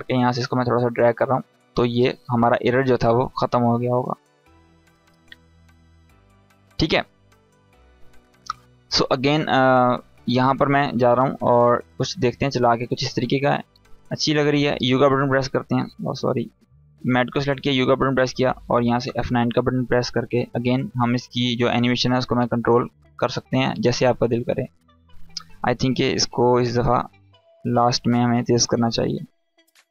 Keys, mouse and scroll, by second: 0.3-1.2 drag, 11.9-13.1 drag, 14.1 u, 16.3 click, 16.6 u, 17.1-18.4 drag, 18.7 F9, 19.9-23.5 drag.